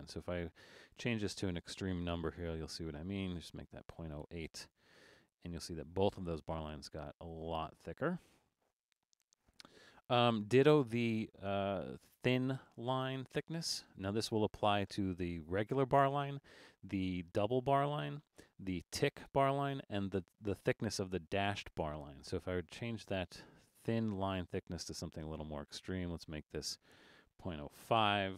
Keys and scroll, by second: 3.6 8, 8.9 super+z, 9.9 alt+super+a, 27.8 5.